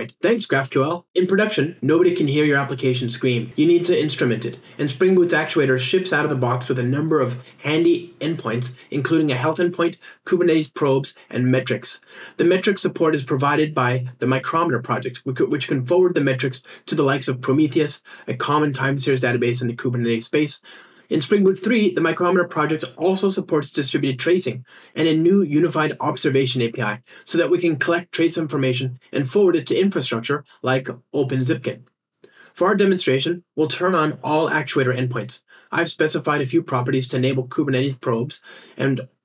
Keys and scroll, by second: 1.5 ctrl+r, 7.2 ctrl+r, 20.0 ctrl+r, 32.0 ctrl+r.